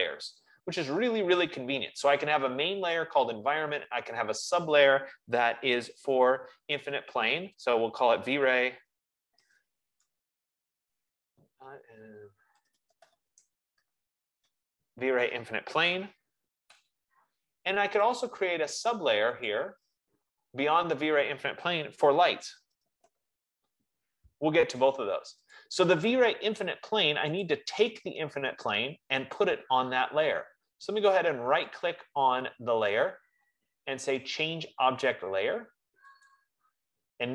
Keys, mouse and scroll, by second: 7.6-12.8 drag, 7.7-16.1 typing, 17.5 Return, 18.5 click, 19.8 click, 22.4-24.3 typing, 25.9 click, 27.7 click, 32.1 right click, 37.0 click.